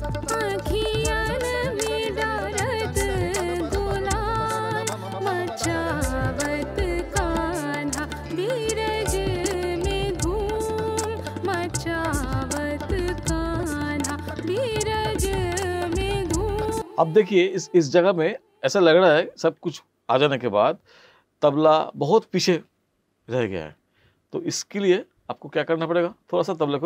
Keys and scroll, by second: 16.7 space.